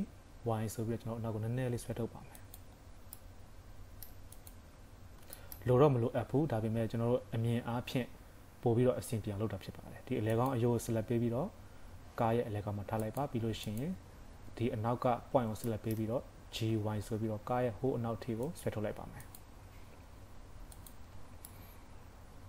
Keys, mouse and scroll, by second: 2.7-3.1 scroll down 4, 3.1 middle click, 4.4 click, 4.7 KP_3, 4.9-5.4 scroll up 4, 5.4 shift+middle click, 6.9 scroll down 1, 10.4 click, 11.2 g, 13.7 click, 15.7 shift+middle click, 16.5 g, 19.3 click, 19.6 scroll down 3, 20.1 g, 21.1 Tab, 21.5 middle click.